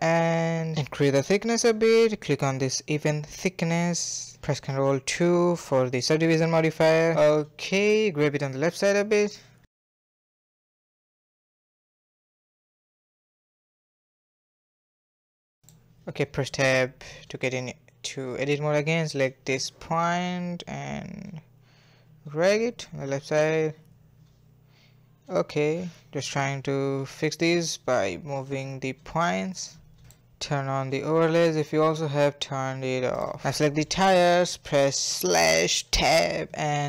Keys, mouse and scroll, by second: 0.1-1.6 shift+drag, 2.2-4.3 middle drag, 4.3 ctrl+2, 4.5-5.2 middle drag, 5.2 a, 5.4 a, 5.4-8.3 middle drag, 8.3 click, 8.5 middle click, 8.6 g, 9.9 a, 10.1 a, 10.3-15.2 middle drag, 15.2 scroll down 1, 15.4-16.1 middle drag, 16.1 Tab, 16.8-17.2 scroll up 1, 17.2-18.4 shift+middle drag, 18.4 click, 18.6-19.1 scroll up 2, 19.1 g, 23.0 click, 23.4 scroll down 2, 23.6-24.9 middle drag, 24.9 g, 27.7 scroll down 2, 27.9-29.8 middle drag, 29.8 scroll down 1, 29.9 middle click, 30.4 scroll down 1, 30.6-31.9 middle drag, 31.9 click, 32.2 middle click, 32.4 Tab, 33.2 click, 33.7 middle click, 34.0 /, 34.3 Tab, 35.3 3, 35.6 alt+click, 36.3 alt+shift+click, 36.7 alt+shift+click.